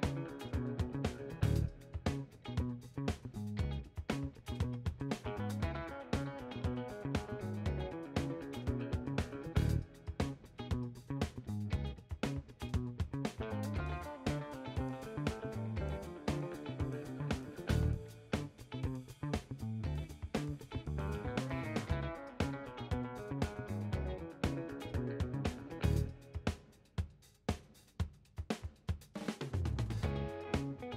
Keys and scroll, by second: 17.3 ctrl+a, 18.3 b, 19.9 ctrl+z.